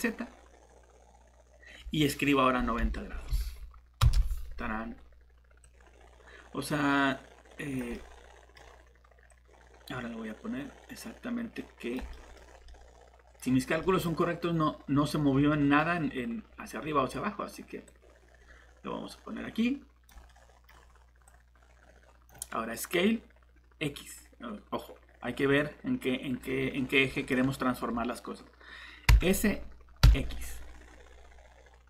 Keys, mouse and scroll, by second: 2.6 9, 3.1 0, 4.0 Return, 5.6 click, 7.8 click, 7.9 middle click, 9.3 click, 12.1 middle click, 12.3 scroll up 1, 12.7 middle click, 13.6 scroll down 1, 13.8 middle click, 14.1 scroll up 1, 15.2 scroll down 1, 15.5 middle click, 17.9 click, 20.3 middle click, 21.3 click, 26.7 scroll down 1, 27.1 middle click, 29.1 s, 30.0 x.